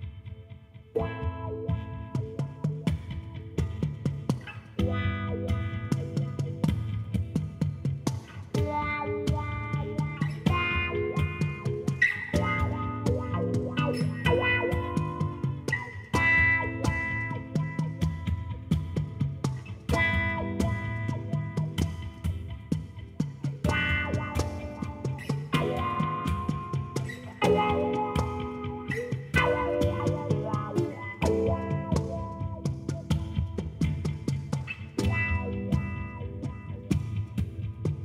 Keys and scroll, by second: 4.5 g, 10.8 g, 14.5 0, 15.4 n, 27.6 i.